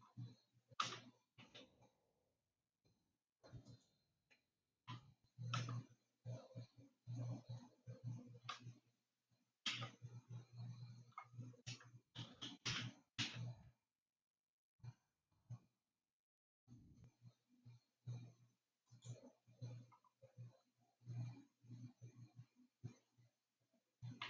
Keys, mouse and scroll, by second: 1.3 g, 5.4-6.7 middle drag, 6.7-7.1 scroll down 5, 8.0-10.0 scroll down 8, 10.0 Tab, 12.7 shift+d, 20.8-23.5 scroll down 2, 23.5 scroll down 3.